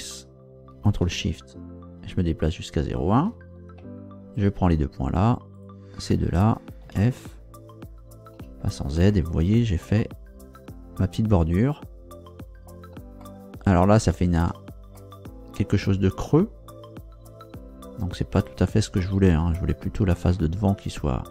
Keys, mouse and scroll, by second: 2.9 ctrl+shift+click, 4.3 shift+right click, 5.5 shift+right click, 6.0 shift+right click, 6.8 shift+f, 8.3 z, 9.1-12.9 middle drag, 13.2-14.6 shift+middle drag, 14.9 shift+middle click, 18.3 middle click, 20.3-21.3 middle drag.